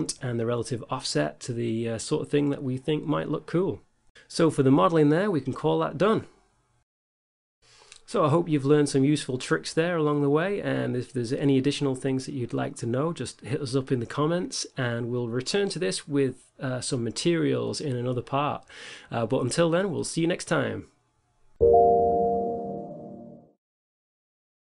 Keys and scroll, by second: 0.5 0, 2.5 9, 2.9 Return, 10.8 a, 13.0 r, 14.4 shift+z.